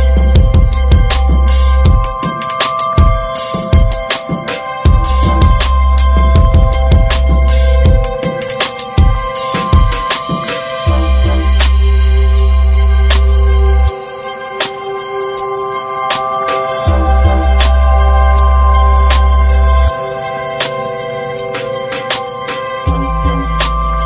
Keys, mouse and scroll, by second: 0.6 alt+middle click, 1.2 Tab, 1.5 middle click, 1.8 scroll up 3, 2.2 middle click, 2.6 shift+middle click, 3.3 3, 3.5 click, 4.2 x, 5.3 scroll down 2, 5.6-5.9 middle drag, 5.9 ctrl+s, 6.1 scroll down 1, 6.3-7.9 shift+middle drag, 8.3-8.8 alt+scroll up 2, 8.8-9.6 shift+middle drag, 9.6-10.2 drag, 10.4 ctrl+z, 10.9-11.7 middle drag, 11.7 click, 13.6 click, 14.1 ctrl+s, 14.5 drag, 14.8 alt+middle click, 15.0 alt+middle click, 15.3 ctrl+s, 16.5-17.9 drag, 17.9-18.7 scroll down 1, 18.7 click, 19.4-19.9 shift+middle drag, 19.9-20.7 scroll down 1, 20.7-22.9 drag.